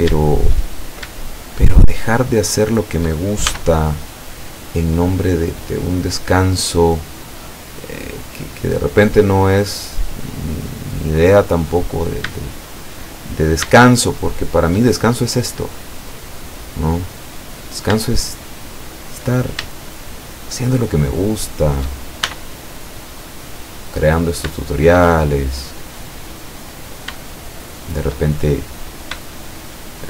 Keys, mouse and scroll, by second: 0.4 shift+right click, 0.7 shift+right click, 1.2 shift+right click, 1.7 shift+right click, 2.0 shift+right click, 2.7 shift+right click, 3.5 shift+e, 5.5 click, 5.8-6.8 middle drag, 6.8-7.2 scroll down 2, 7.5 middle click, 7.8-8.4 drag, 10.5-12.2 drag, 13.8-15.0 shift+middle drag, 15.2 shift+middle click, 16.8-17.3 scroll up 1, 17.8 shift+right click, 19.9 shift+right click, 20.4 shift+right click, 20.8 shift+right click, 21.2 shift+right click, 21.6 shift+right click, 22.3 shift+e, 23.7 click, 24.6-26.1 shift+middle drag, 27.3 shift+right click, 27.7 shift+right click, 28.8 right click, 29.4 shift+right click.